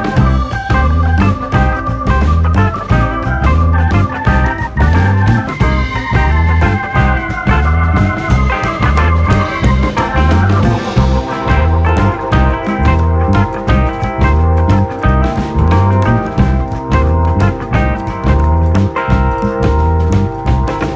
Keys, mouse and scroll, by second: 0.3 KP_1, 0.6-1.6 scroll up 1, 1.6 ctrl+right click, 2.2 r, 3.0 g, 3.8 scroll down 3, 3.9-4.9 middle drag, 5.1 Tab, 5.4-5.8 scroll down 3, 5.8-6.3 shift+middle drag, 6.3 alt+/, 6.5-7.0 scroll up 1, 7.0-8.0 drag, 8.0-8.6 scroll down 2, 8.6-9.8 scroll down 3, 10.7-11.1 scroll down 1, 11.3-12.9 drag, 12.9 KP_0, 13.8 drag, 14.1 scroll up 2, 14.3-15.9 middle drag, 15.9 scroll up 1, 16.1-16.5 middle drag, 16.5-17.0 drag, 17.0 Tab, 17.2 click, 17.6 click, 18.6 click, 18.8-19.1 scroll down 6, 19.1 middle click, 19.7 KP_3, 20.1 KP_1, 20.5-20.9 scroll up 1.